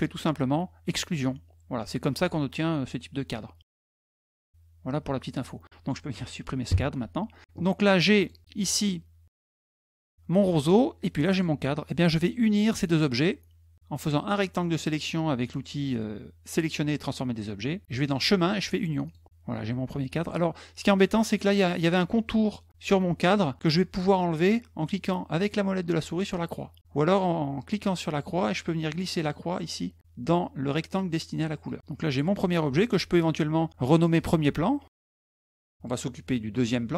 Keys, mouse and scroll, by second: 0.8 click, 8.0 click, 9.1 middle click, 9.2 middle click, 10.0 middle click, 11.1 click, 12.3-13.7 drag, 17.9 click, 18.8 click, 26.6 middle click, 27.9-31.4 drag, 31.9 click, 33.8 click, 34.8-35.9 typing, 36.4 click.